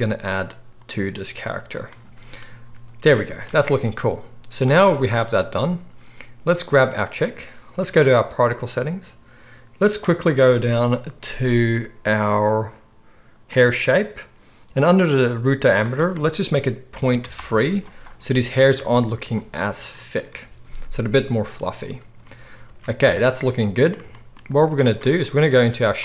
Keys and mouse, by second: 4.7 z, 6.7 click, 6.8-8.4 middle drag, 8.4 click, 8.5-13.5 middle drag, 13.5-26.0 drag, 18.8 z, 22.4 ctrl+s, 22.6 ctrl+s, 24.5 z.